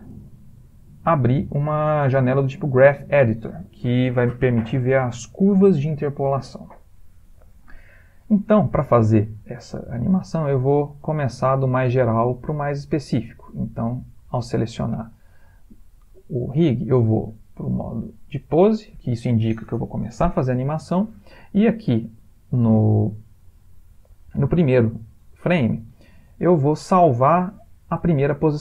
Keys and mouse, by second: 13.5 click, 17.3 click.